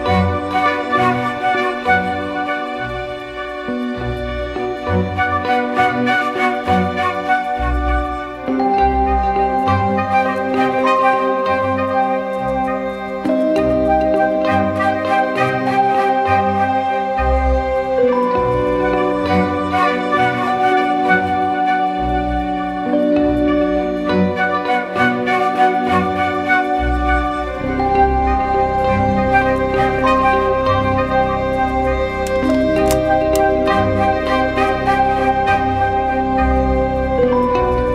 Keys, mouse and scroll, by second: 3.6 Return, 5.3 Down, 6.5 Left, 7.4 Left, 7.6 Left, 7.7 Left, 7.9 Left, 8.5 Left, 8.7 Left, 9.3 Down, 9.4 Down, 9.6 Down, 9.8 Down, 10.0 Down, 11.6 ctrl+t, 12.8 ctrl+-, 13.2 ctrl+-, 14.1 ctrl+-, 14.3 alt+shift+click, 17.7 ctrl+-, 18.7 alt+shift+click, 23.5 Return, 24.3 ctrl+=, 24.8 ctrl+=, 25.3 ctrl+=, 25.8 ctrl+-, 26.6-27.2 alt+scroll up 1.